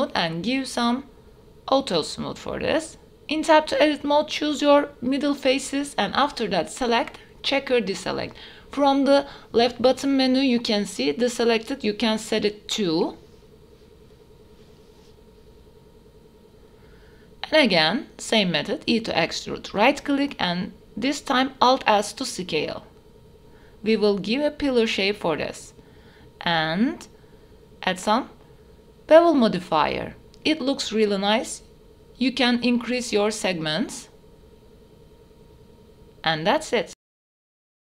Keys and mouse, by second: 1.3 click, 2.1 click, 2.6 middle click, 3.0 Tab, 3.9 3, 4.2 click, 4.7 alt+click, 5.9-7.4 drag, 8.6 click, 10.2 click, 11.7 click, 12.9 shift+click, 14.6 click, 15.3 click, 17.6 e, 18.4 alt+s, 23.3 Tab, 23.7 middle click, 24.3 click, 24.7-28.9 drag, 29.3-30.0 middle drag, 30.4-30.7 middle drag, 31.9 shift+middle click, 34.4 click, 35.2 click, 35.9-36.9 middle drag, 37.0 shift+middle drag, 37.4 middle click, 37.6 shift+middle drag.